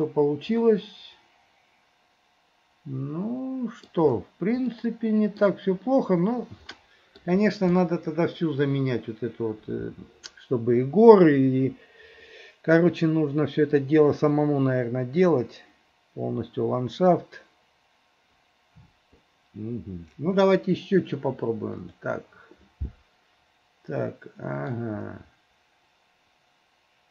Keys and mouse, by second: 0.7 middle click, 2.1-4.0 middle drag, 4.8 middle click, 6.9 middle click, 21.8-23.5 drag, 24.1 click, 24.1 right click.